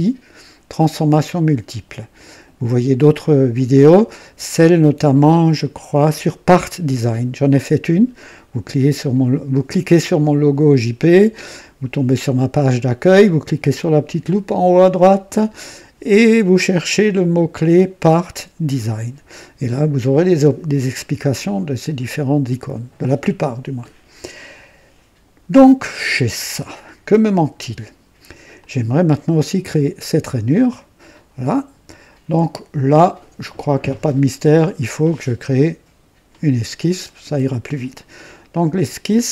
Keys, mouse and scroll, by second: 25.6 scroll down 1, 26.8 right click, 28.6-29.3 drag, 30.5-31.2 drag, 34.1-35.3 drag, 35.5 click, 39.1 click.